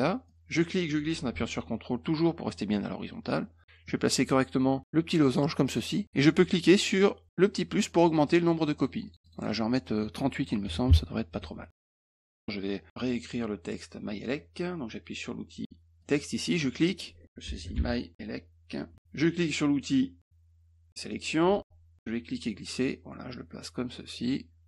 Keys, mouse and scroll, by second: 0.2-3.6 drag, 7.8 click, 8.2 click, 8.5 click, 8.7 click, 8.9 click, 9.0 click, 9.1 click, 9.2 click, 9.3 click, 9.4 click, 9.8 click, 11.4 Tab, 11.7 click, 12.4 middle click, 16.0 click, 16.7 click, 17.4 shift+m, 17.7 y, 18.9 e, 21.1 click, 22.1-24.6 drag.